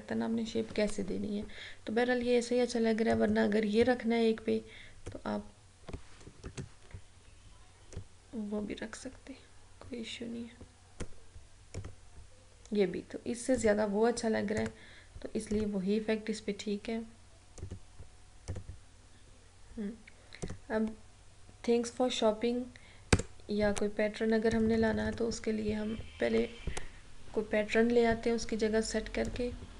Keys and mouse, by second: 3.2-6.5 drag, 6.5 ctrl+z, 8.0-11.9 drag, 24.6 click, 29.4 click.